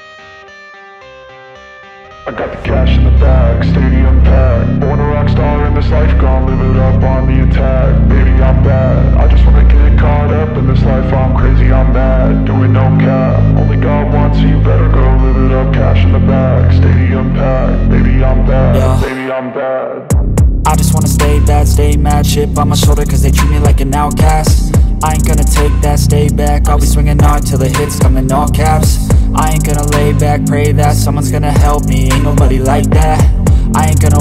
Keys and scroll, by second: 32.1 space.